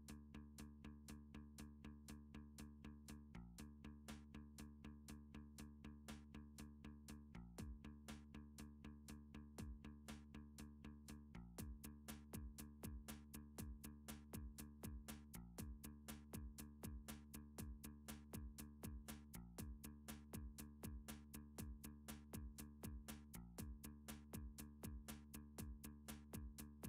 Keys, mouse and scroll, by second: 0.0 middle click, 0.2-0.5 scroll up 2, 0.8 shift+middle click, 1.2 3, 1.8 click, 2.6 shift+click, 2.8 shift+middle click, 3.6 1, 3.9 click, 5.2 middle click, 6.3 middle click, 6.6 g, 7.8 click, 8.3 middle click, 8.7 click, 10.5 middle click, 10.7 g, 11.7 click, 12.5 middle click, 13.3 middle click, 13.4 g, 14.0 click, 14.5 middle click, 14.6 middle click, 14.8 scroll, 15.0 click, 15.3 g, 15.8 click, 16.7-17.1 scroll, 17.2 middle click, 17.3-18.1 scroll, 18.6 middle click, 19.2 middle click, 19.8 middle click, 20.5 middle click, 21.1 3, 21.7 scroll down 6, 24.0 scroll, 25.6 alt+middle click, 26.3 alt+middle click, 26.4 middle click, 26.4 scroll up 4, 26.7 scroll down 4.